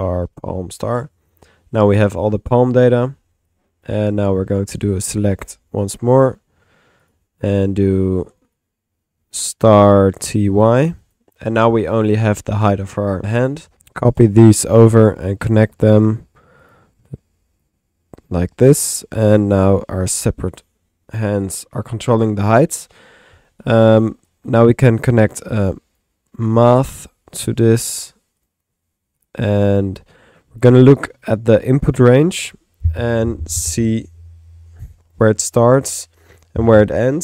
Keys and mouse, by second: 2.8 middle click, 3.5 click, 4.4-5.4 drag, 6.3 click, 7.0 click, 7.4 middle click, 8.3 click, 13.5-14.8 typing, 13.8 ctrl+right click, 15.9 ctrl+click, 16.6 ctrl+click, 17.6-18.8 drag, 23.9 click, 25.5 click, 25.8-26.6 typing, 26.6 click, 27.1 Tab, 27.6 m, 28.5 click, 29.2 click, 29.7 middle click.